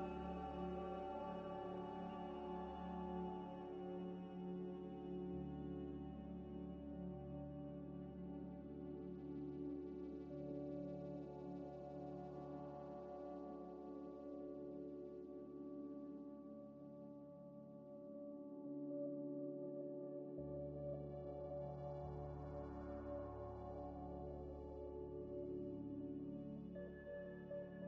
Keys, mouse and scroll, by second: 0.1 s, 1.1 scroll up 1, 1.7 scroll up 1, 4.9 scroll up 1, 4.9 scroll down 1, 5.5 shift+a, 7.5-9.6 typing, 8.2 KP_Enter, 8.7 Return, 10.1 scroll up 1, 11.0 g, 12.5 s, 13.9 Tab, 14.3 1, 15.7 g, 15.8 g, 15.9 x, 16.3 y, 17.2 Tab, 18.3 Tab, 18.3 Tab, 18.6 a, 19.3 f, 20.6 Tab, 20.8 middle click, 21.7 e, 22.6 z, 23.3 Tab, 23.5 g, 23.6 x, 27.0 z, 27.6 z.